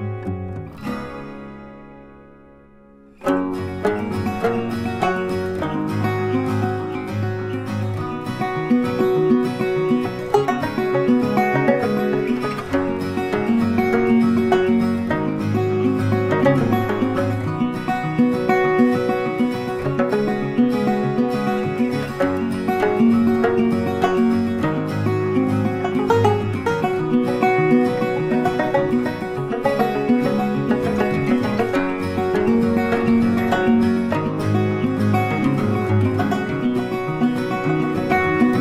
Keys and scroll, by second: 7.2 ctrl+t, 15.0 ctrl+t, 32.6 ctrl+t.